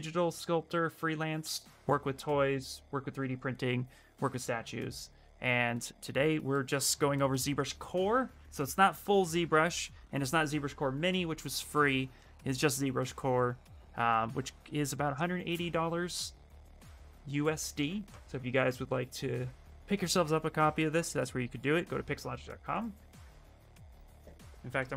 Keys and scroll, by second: 24.5-24.9 typing.